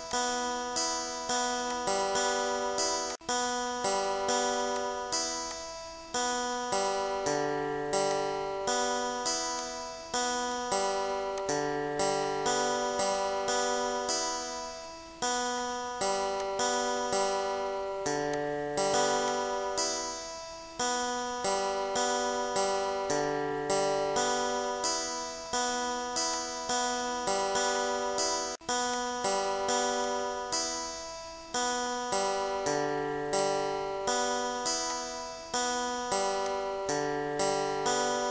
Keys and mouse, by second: 0.1 click, 1.4 click, 2.7 click, 4.7 click, 5.5 click, 8.1 click, 9.6 click, 10.5 click, 11.4 click, 12.3 click, 13.4 click, 14.3 click, 15.6 click, 16.4 click, 17.4 Delete, 18.3 click, 19.3 click, 20.0 Delete, 20.6 click, 22.2 click, 23.4 click, 25.5 click, 26.3 click, 27.1 Delete, 27.8 click, 28.9 click, 30.1 click, 30.8 click, 31.7 click, 33.4 click, 34.1 click, 34.9 click, 36.5 click.